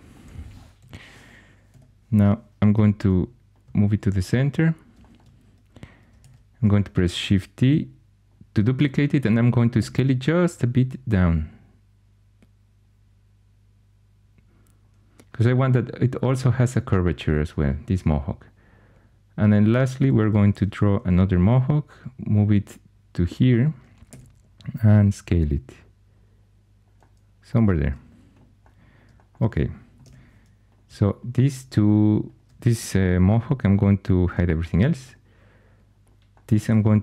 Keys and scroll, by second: 0.7 1, 1.6 2, 2.7 g, 6.1 shift+d, 9.7 s, 20.4 shift+d, 24.0 s, 29.9 2, 34.1 shift+h, 36.6 w.